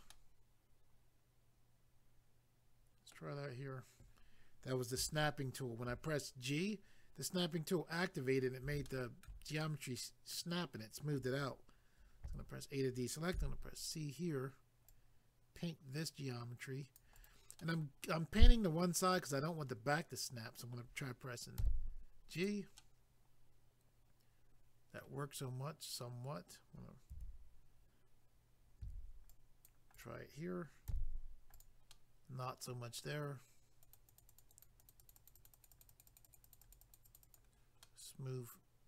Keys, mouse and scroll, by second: 0.1 middle click, 8.9 shift+middle click, 9.6 middle click, 12.2 a, 14.1-14.9 scroll up 1, 14.9 click, 17.1 right click, 17.2 right click, 17.6 middle click, 22.3 click, 22.5 click, 22.8 middle click, 25.3 scroll up 1, 27.1 a, 29.3 click, 29.9 right click, 30.0 right click, 30.9 g, 31.5 click, 31.9 middle click, 33.8 click, 33.9 click, 34.1 click, 34.2 double click, 34.3 click, 34.4 click, 34.5 click, 34.6 double click, 34.8 click, 34.9 click, 35.0 click, 35.1 double click, 35.3 click, 35.5 double click, 35.5 click, 35.7 click, 35.8 double click, 35.9 click, 36.0 click, 36.2 double click, 36.3 click, 36.4 click, 36.4 click, 36.5 double click, 36.6 click, 36.7 click, 36.8 click, 36.9 double click, 37.0 click, 37.2 click, 37.2 click, 37.4 double click, 37.8 middle click.